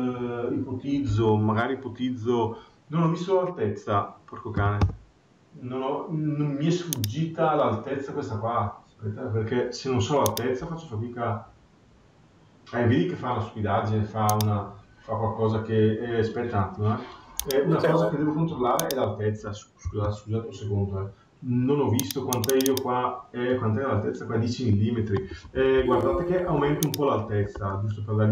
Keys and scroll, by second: 4.7 Return, 19.8 Delete, 25.2 Escape.